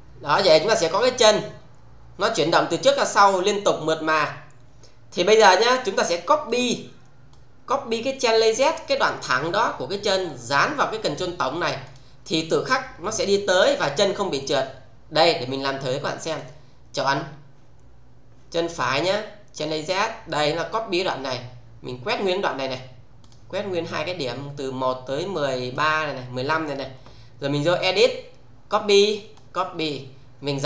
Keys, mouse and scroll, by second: 6.5 click, 11.9 click, 16.3 click, 19.5 click, 20.7-22.8 click, 27.9 click, 29.3 click.